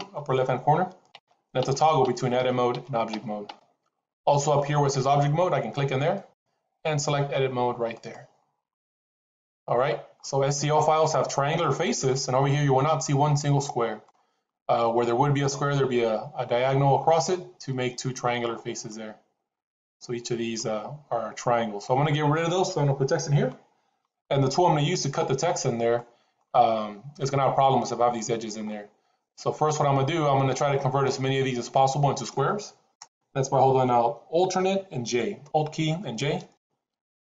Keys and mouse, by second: 0.1 Tab, 1.1 Tab, 1.5 Tab, 1.9 Tab, 2.3 Tab, 2.6 Tab, 3.0 Tab, 3.4 Tab, 6.0-8.1 drag, 10.1 middle click, 12.0-13.9 middle drag, 18.5-21.7 middle drag, 25.8 middle click, 28.6-29.7 middle drag, 30.6 middle click, 36.3 alt+j.